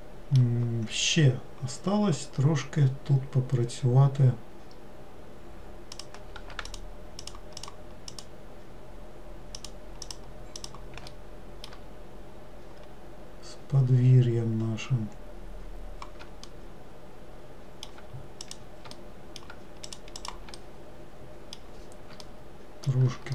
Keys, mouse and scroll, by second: 0.9-1.7 scroll down 1, 1.7-2.7 scroll down 1, 6.1 click, 6.8 shift+click, 7.4 shift+click, 7.7 shift+click, 8.2 shift+click, 9.7 shift+click, 10.2 shift+click, 10.7 shift+click, 11.3-14.3 middle drag, 16.7-18.6 middle drag, 18.6 shift+click, 19.1 middle click, 20.0 shift+click, 20.4 shift+click, 20.8-23.3 middle drag.